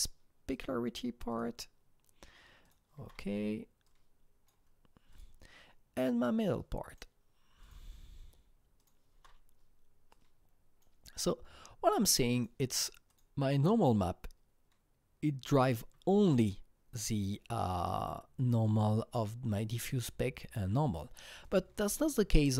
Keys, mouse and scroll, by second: 0.5 click, 1.3 click, 2.6 click, 3.0 alt+Tab, 3.8-6.4 drag, 6.4 click, 6.9 click, 7.6 click, 8.8 click, 9.1 alt+Tab, 10.1-13.1 drag, 13.1-15.7 drag, 21.4 click.